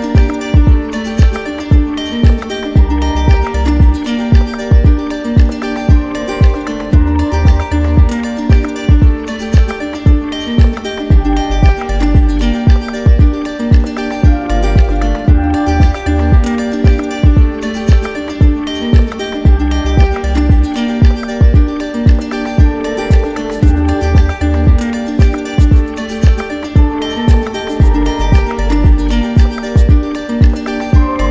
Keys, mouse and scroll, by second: 1.5 click, 2.5 click, 3.0 shift+click, 3.1 shift+click, 4.0 alt+click, 7.3 click, 8.6 click, 9.8 alt+click, 10.8 alt+click, 11.3 click, 12.0 click, 13.7 click, 16.2 click, 22.5 click, 23.6 click, 24.4 click, 24.7 q, 25.4 click, 25.8 shift+click, 26.6 d, 26.9 d, 27.1 d, 27.3 d, 28.4 click, 28.8 shift+click, 29.9 ctrl+click, 30.6 ctrl+click, 30.9 shift+click.